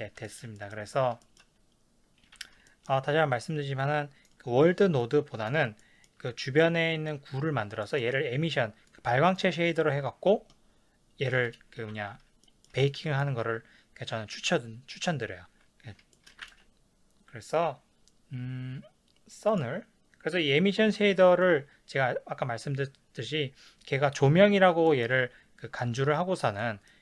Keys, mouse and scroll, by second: 0.2 shift+middle click, 3.8 click, 5.0 click, 5.8-6.4 ctrl+middle drag, 6.4 click, 7.8-8.9 ctrl+middle drag, 8.9 click, 12.4 shift+middle drag, 16.6 ctrl+s, 16.6-19.6 middle drag, 19.6 click, 24.9-27.0 shift+middle drag.